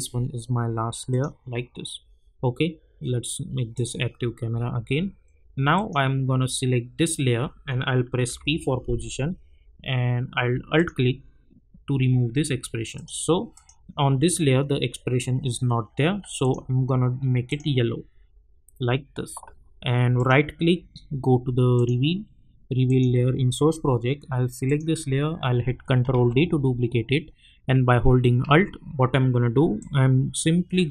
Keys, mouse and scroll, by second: 1.1 click, 3.7 click, 4.5-4.9 scroll up 1, 5.7 click, 8.2 p, 10.8 alt+click, 16.4 click, 20.2 right click, 21.7 click, 26.1 ctrl+d, 29.8-30.9 alt+drag.